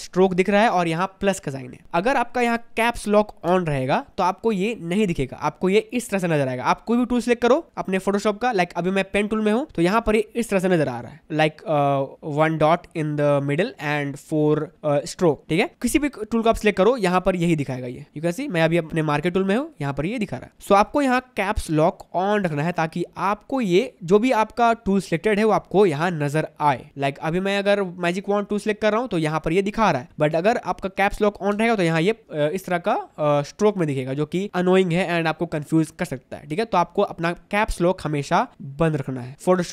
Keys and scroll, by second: 7.4 p.